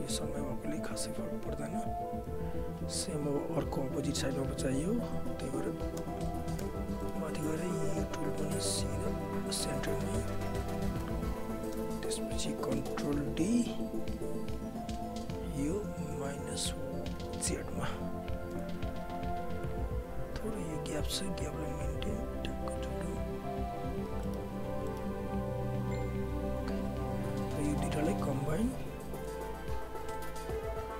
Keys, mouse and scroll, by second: 1.7 right click, 2.4 alt+click, 2.8 alt+right click, 3.0-6.0 alt+drag, 6.0 space, 7.0 alt+middle click, 7.1 alt+right click, 7.5-9.9 typing, 8.6 click, 11.0 space, 12.3 alt+right click, 13.2 ctrl+d, 13.9 r, 14.8 click, 18.5 Return, 19.4 alt+click, 19.7 alt+right click, 20.4 w, 21.5 click, 24.2 alt+middle click, 24.4 alt+right click, 24.9 alt+middle click, 25.0 alt+right click, 25.8 click, 26.9 alt+right click, 27.5 click, 28.0 shift+right click, 30.1 alt+click.